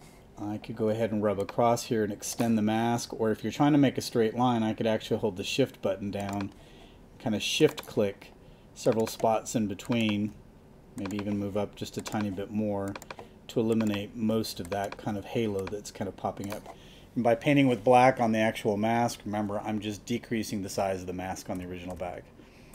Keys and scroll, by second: 21.5 super+-.